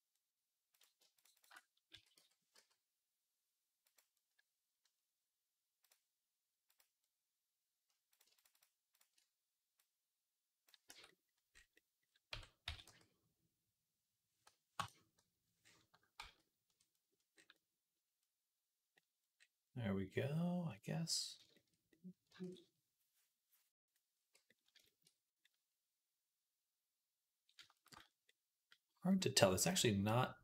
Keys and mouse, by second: 0.0 click, 0.0-1.0 middle drag, 0.0-10.7 right drag, 1.0 alt+shift+click, 1.2 alt+shift+click, 1.8 s, 5.7 click, 8.2 alt+shift+click, 8.8 alt+shift+click, 9.6-10.7 drag, 10.7 Tab, 12.2 Tab, 12.5 s, 16.0 ctrl+z, 17.2 middle click, 17.7 middle click, 18.2 middle click, 21.7-24.3 drag, 22.3 ctrl+s, 24.3-25.7 middle drag, 27.8 click, 27.8 middle click, 27.8 right click.